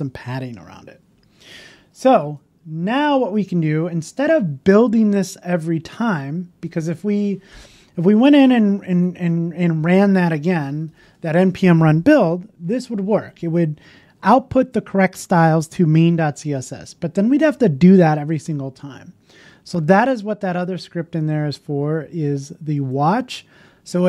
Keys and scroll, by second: 1.8 super+s, 1.8 super+s.